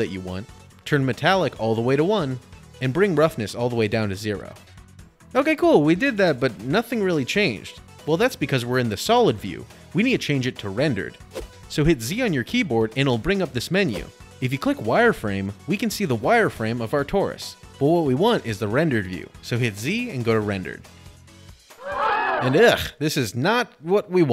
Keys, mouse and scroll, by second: 0.9 click, 1.1 click, 2.9 click, 4.6 click, 6.0 click, 7.9 click, 11.5 z, 14.5 click, 15.0 middle click, 15.0 middle click, 15.2 middle click, 15.2 middle click, 17.9 middle click, 18.1 middle click, 18.3 middle click, 19.4 middle click, 20.2 z, 21.2 click.